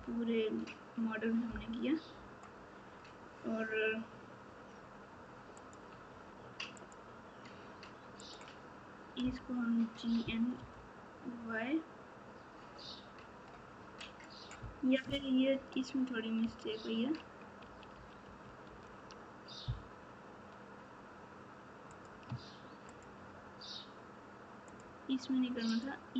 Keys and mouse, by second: 1.4 KP_4, 5.6 click, 6.7 click, 8.1 click, 21.8 click, 24.6 shift+click, 25.6 shift+click.